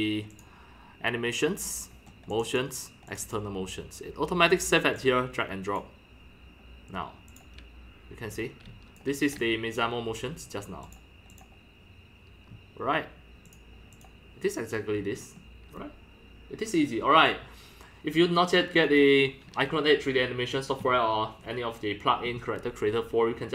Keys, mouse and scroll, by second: 0.3 click, 1.8 scroll, 1.9 scroll down 1, 1.9 scroll, 2.0 scroll down 3, 2.4 click, 3.2 click, 5.8 click, 7.3 click, 7.5-9.0 drag, 8.7 c, 9.4 click, 9.4 c, 10.9 click, 11.1-11.9 drag, 12.3 click, 13.4 click, 13.8 click, 15.1-16.5 scroll down 4, 15.3-15.7 middle drag, 16.5 scroll, 17.1-17.7 scroll down 2, 18.9 click, 22.2-23.5 drag.